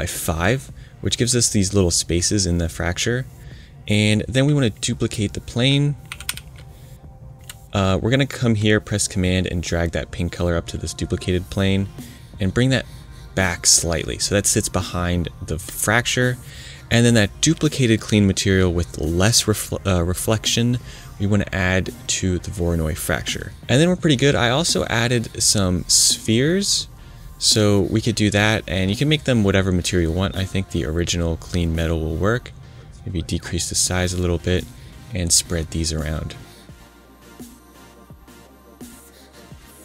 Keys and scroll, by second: 6.0 super+c, 6.2 super+v, 36.5 super+c, 36.8 super+v, 37.8 super+v, 38.7 super+c, 38.8 super+v.